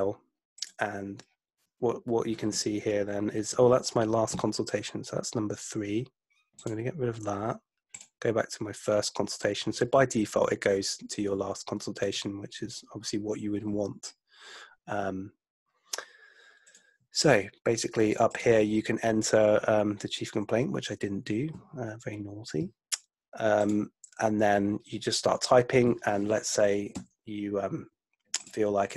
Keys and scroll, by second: 27.0 Down.